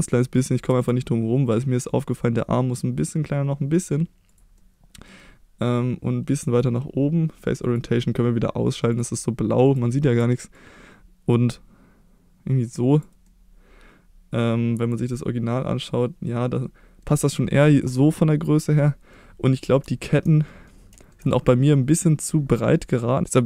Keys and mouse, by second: 0.1 middle click, 0.7 s, 4.2 click, 4.5-5.0 middle drag, 5.6-6.6 drag, 7.7-9.8 drag, 10.6 click, 13.2-17.0 middle drag, 17.2-17.5 middle drag, 19.1-19.6 middle drag, 19.9-20.2 shift+middle drag, 20.4 middle drag, 21.9 click, 22.5-23.1 middle drag, 23.1 Tab.